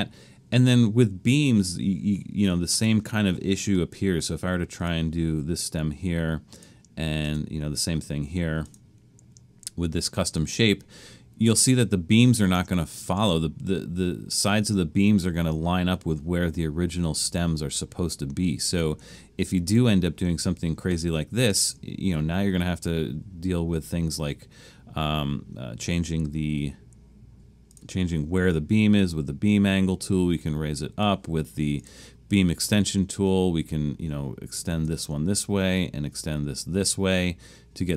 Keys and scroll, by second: 2.7 Return, 7.3 Return.